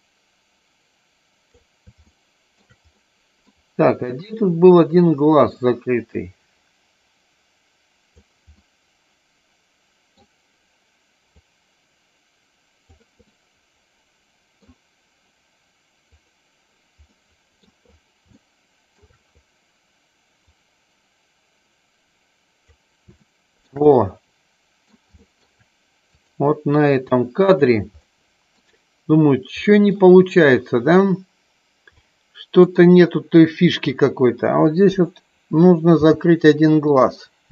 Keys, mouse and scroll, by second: 2.1 shift+middle click, 2.9 middle click, 4.7-8.2 drag, 8.6-10.2 middle drag, 11.5-12.9 drag, 13.3 middle click, 14.2 middle click, 17.1 middle click, 18.2 shift+middle click, 20.6-22.7 drag, 23.1 shift+middle click, 23.8 middle click, 25.1 shift+middle click, 26.2 click, 28.1 middle click, 29.6 middle click, 32.0 middle click, 32.7 middle click, 33.8 click.